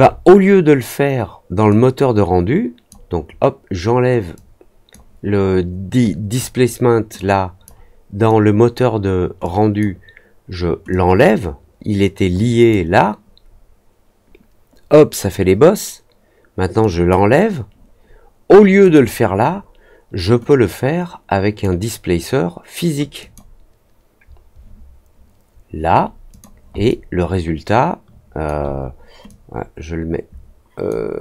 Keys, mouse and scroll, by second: 1.6-2.8 drag, 4.3-4.8 drag, 7.1 click, 8.2 click, 9.4 click, 10.8-12.6 drag, 16.7 click, 18.8 click, 20.4-21.5 drag, 23.1 click, 26.2 click, 26.8-28.4 alt+drag, 29.2-30.8 drag.